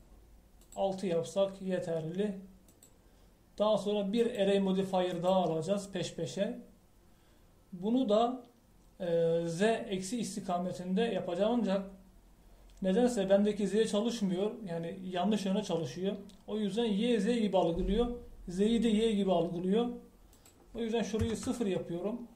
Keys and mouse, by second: 21.3-22.3 drag.